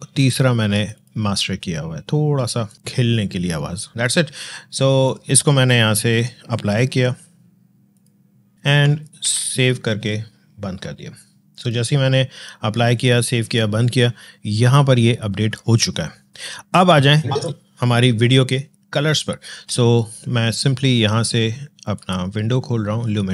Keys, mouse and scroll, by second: 3.9 space, 7.8 click, 8.6 ctrl+Num_Lock, 9.1 ctrl+s, 11.4 click, 16.7-19.6 drag, 21.8 click.